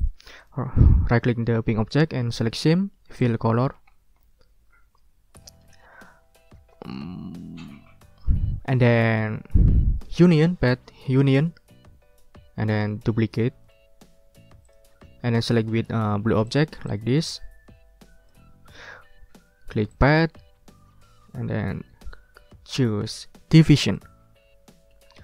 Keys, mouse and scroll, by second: 0.0 ctrl+click, 0.4 ctrl+right click, 3.2 click, 3.9 ctrl+scroll down 2, 10.3 click, 11.3 click, 13.6 right click, 14.6 click, 16.5 shift+click, 17.1-18.5 shift+drag, 18.6 ctrl+z, 20.0 click, 23.8 click.